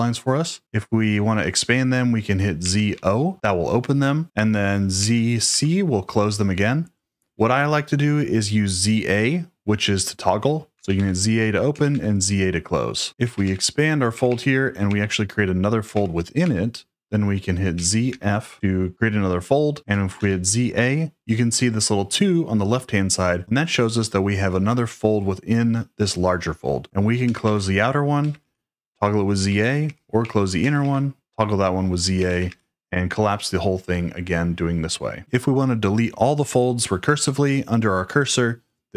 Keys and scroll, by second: 2.3-3.4 typing, 4.9 z, 5.4 c, 10.5-11.8 typing, 12.9-14.8 typing, 15.9 shift+v, 17.5-18.6 typing, 19.8 z, 20.1 a, 26.6-30.7 typing, 31.9-32.9 typing.